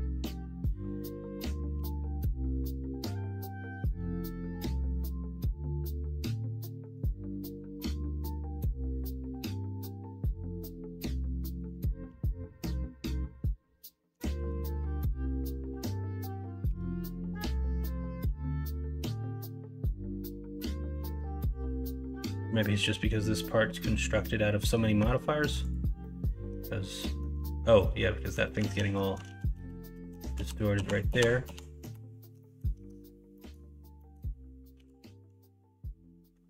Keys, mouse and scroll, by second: 1.7 g, 3.4-4.8 middle drag, 12.0 g, 14.3 shift+Tab, 14.7 shift+Tab, 16.6 3, 18.2 g, 21.0 ctrl+z, 21.9 middle click, 22.1 Tab, 24.5 Tab, 25.0 Tab, 26.0 middle click, 26.3 Tab, 26.6 middle click, 27.7 middle click, 28.6 ctrl+z, 28.9 ctrl+middle click, 29.3 ctrl+z, 29.6-32.3 ctrl+z, 32.3 middle click, 32.7 Tab, 33.3 middle click, 33.9 middle click, 34.7 g.